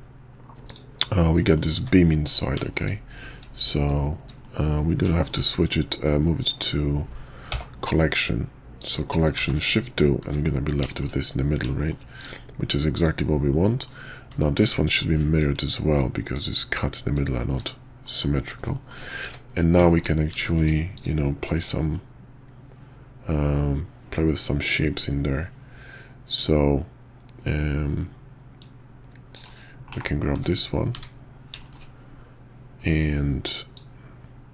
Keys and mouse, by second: 0.7 click, 1.2 click, 1.4 middle click, 2.6 shift+click, 4.4 middle drag, 5.1 shift+middle drag, 6.4 click, 7.5 m, 9.4 shift+2, 10.2 `, 10.9 shift+click, 11.8 shift+click, 12.2 click, 12.9 click, 13.5-13.8 middle drag, 14.3 alt+x, 16.3 click, 17.4 shift+click, 18.0 middle click, 18.7 shift+middle click, 19.2 `, 19.8 shift+click, 20.4 shift+click, 20.9 click, 21.6 middle click, 28.6 click, 29.9 /, 30.3 `, 30.9 `, 31.6 shift+click, 33.7-34.5 drag.